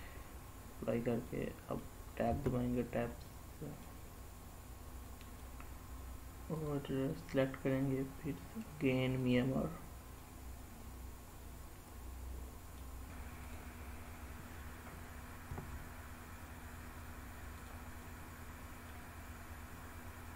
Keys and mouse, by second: 1.0-1.6 middle drag, 2.0 Tab, 3.1 middle click, 4.8 middle click, 6.3-9.1 drag, 9.9-12.5 middle drag, 13.4 drag, 15.4 g, 17.5 click, 17.9 middle click.